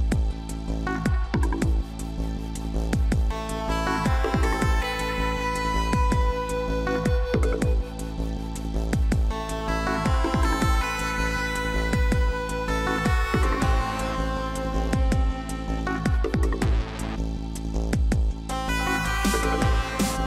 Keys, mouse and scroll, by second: 0.0 ctrl+t, 1.4 ctrl+j, 4.7-5.3 scroll up 2, 5.3 scroll up 2, 6.0 scroll up 1, 6.2 ctrl+-, 7.5 ctrl+t, 12.3 right click.